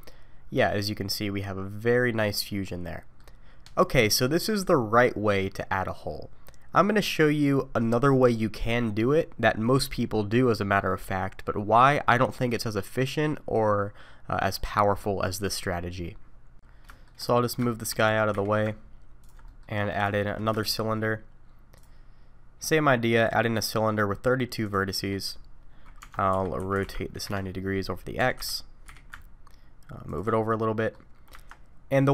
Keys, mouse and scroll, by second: 16.3 shift+middle click, 16.3 scroll down 3, 16.7 scroll down 2, 16.9 middle click, 17.3 middle click, 17.7 shift+middle click, 18.1 g, 19.5 middle click, 19.8 scroll up 2, 20.1 shift+middle click, 20.6 shift+a, 23.2 click, 24.6 click, 25.0 middle click, 26.0 Tab, 26.3 r, 28.2 g, 30.5 middle click, 31.3 Tab.